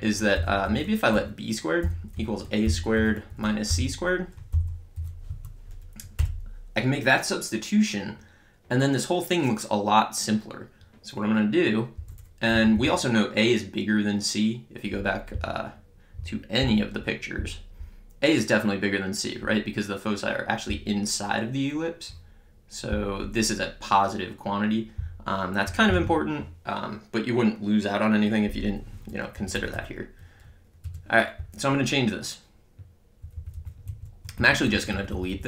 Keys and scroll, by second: 0.0-4.9 typing, 1.1 Right, 3.3 Right, 5.3 Right, 6.2 Return, 12.0 Up, 12.5 Down, 29.4 Up, 30.9 Return, 31.3 Left, 33.8 Right.